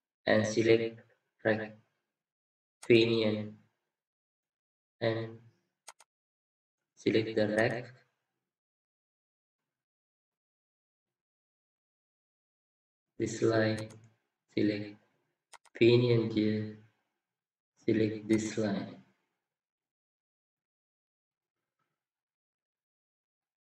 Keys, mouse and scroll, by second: 4.5-8.4 scroll up 1, 8.4 scroll up 1, 9.0 scroll down 1, 9.7-10.1 scroll up 1, 10.1 scroll down 1, 22.2-23.5 scroll up 1.